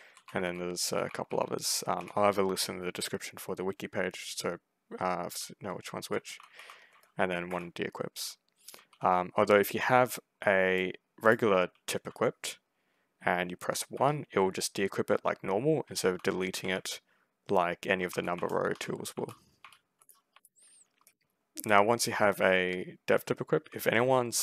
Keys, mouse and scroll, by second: 0.0-1.8 typing, 5.2-9.3 typing, 10.7 click, 11.4 a, 11.8 w, 13.8 1, 15.9 2, 16.5 a, 17.7-21.3 typing, 23.4 s, 24.1 w.